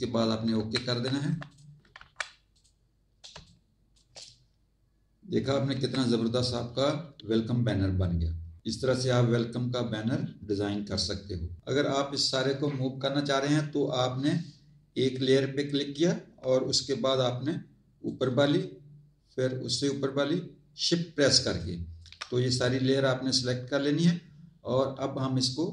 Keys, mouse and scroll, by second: 0.5 Tab, 1.1 z, 1.4 alt+click, 1.9 z, 2.5 click, 3.3 space, 3.4 click, 5.7 Tab, 15.1 click, 18.0 shift+click, 19.8 shift+click, 21.4 shift+click, 22.6 scroll up 1.